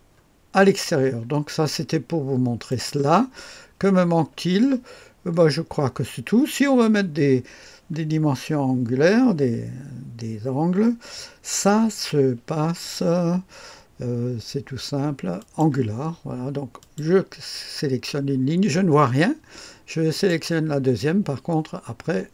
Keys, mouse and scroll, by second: 0.1-2.7 scroll down 1, 2.7 click, 3.3-4.5 scroll down 1, 4.5 middle click, 5.4 middle click, 15.4 click, 16.8 click, 17.5 click, 20.1 click.